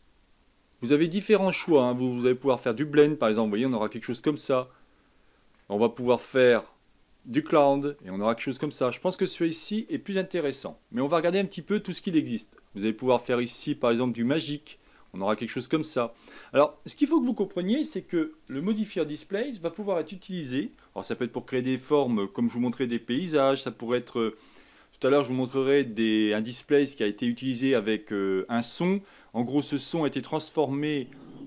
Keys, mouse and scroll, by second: 0.7-3.5 drag, 3.5-6.3 middle drag, 6.3-8.0 drag, 8.0-11.4 middle drag, 11.4-11.8 shift+scroll up 1, 12.5-15.0 drag, 15.0-18.2 middle drag.